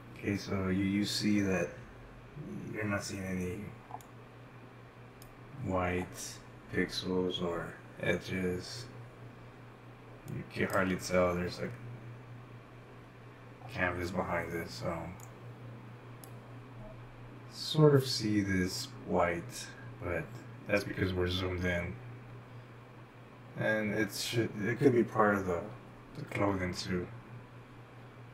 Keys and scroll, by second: 0.2-2.6 typing, 0.5 shift+Left, 2.7 shift+Left, 5.4-6.0 typing, 5.6 shift+Right, 6.3 shift+Right, 6.4 shift+Left, 6.8 shift+Left, 7.1 shift+Right, 7.8 shift+Right, 8.1 shift+Right, 8.3 typing, 8.5 shift+Right, 8.7 shift+Right, 8.8 shift+Right, 9.1 shift+Left, 10.9 shift+Left, 11.0 Right, 11.4 Right, 11.7 shift+Left, 12.1 shift+Left, 12.4 shift+Left, 12.9 shift+Right, 13.7-14.8 typing, 17.8 Right, 18.0-24.0 typing, 20.0 shift+Right, 22.7 shift+Left, 22.9 shift+Right, 25.9 Left, 26.6 shift+Left, 26.9-28.0 typing, 27.4 shift+Left, 28.0 shift+Right.